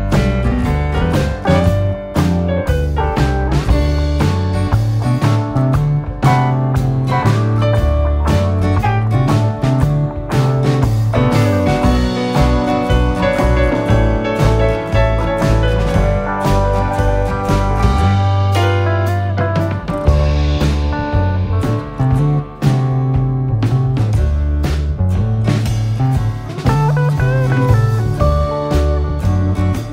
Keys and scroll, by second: 3.5 Escape, 11.6 Escape, 19.6 7.